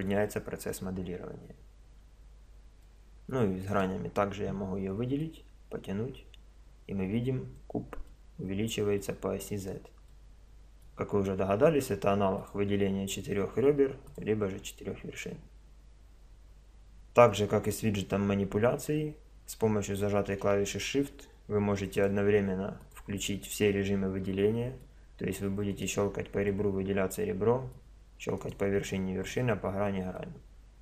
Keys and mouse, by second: 2.9-4.8 middle drag, 4.8-7.0 drag, 8.1-12.4 middle drag, 12.4-15.8 drag, 22.0-24.8 drag, 24.8 middle click, 25.7 right click, 26.5-28.4 middle drag, 28.4-30.2 right drag, 30.2-30.8 middle drag.